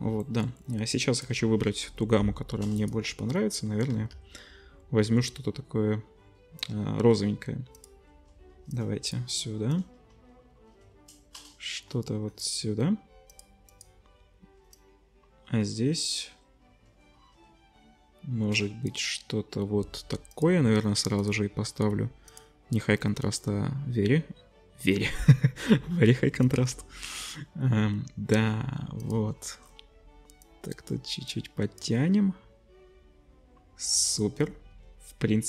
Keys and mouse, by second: 1.2-2.1 drag, 3.9 z, 7.9-13.4 middle drag, 13.9-20.3 middle drag, 20.4 middle click, 34.8-35.4 drag.